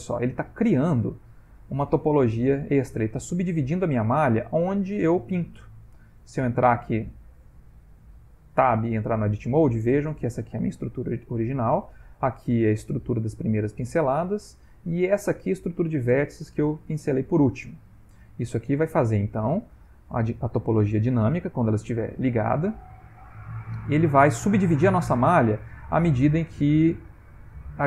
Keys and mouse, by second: 5.8 ctrl+middle click, 7.2 Tab, 8.0 ctrl+middle click, 8.9 middle click, 11.1 ctrl+middle click, 13.6 ctrl+middle click, 14.1 shift+middle click, 14.9 ctrl+middle click, 17.5 ctrl+middle click, 19.6 Tab, 21.6 click, 23.8 ctrl+middle click, 25.3 click, 26.0 click, 27.2 click.